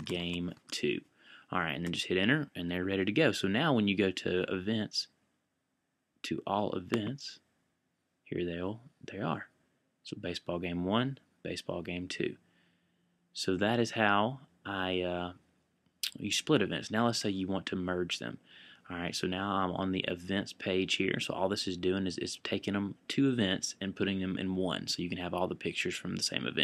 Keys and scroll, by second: 0.0-1.1 typing.